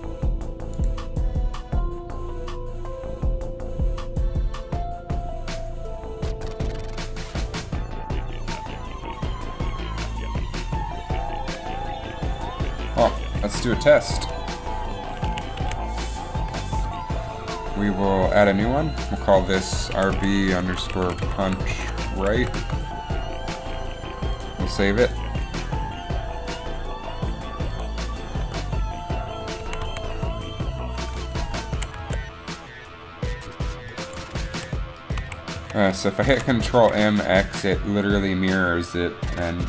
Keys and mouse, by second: 15.4 a, 15.7 a, 16.5 KP_7, 20.2 a, 20.2 KP_7, 24.4-26.2 drag, 29.8 a, 30.0 a, 31.6 ctrl+m, 34.6 a, 35.1 a, 35.3 a, 35.7 a, 36.3 ctrl+m.